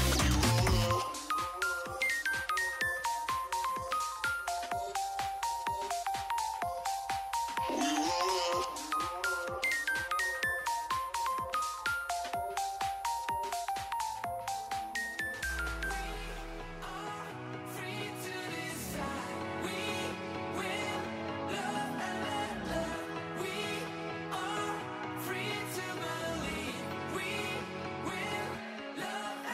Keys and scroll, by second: 13.3 2, 13.8 5, 14.4 0.